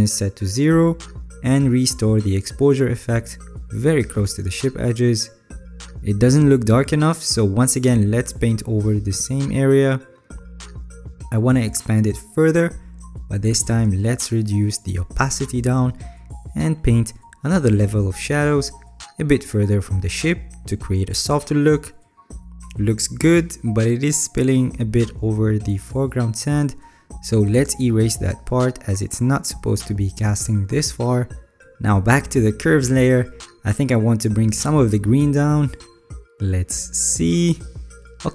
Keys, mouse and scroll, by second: 0.5-2.5 alt+right drag, 3.4 ctrl+z, 14.3 alt+right click, 14.5 alt+right click, 28.5 alt+right click, 30.9 alt+right click.